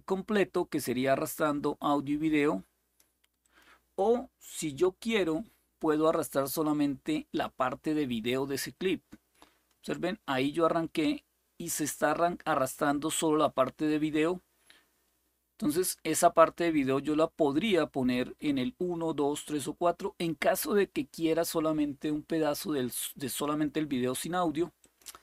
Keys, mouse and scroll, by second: 0.0-2.7 drag, 3.2 click, 4.4 Delete, 8.3-23.9 drag, 24.5 click.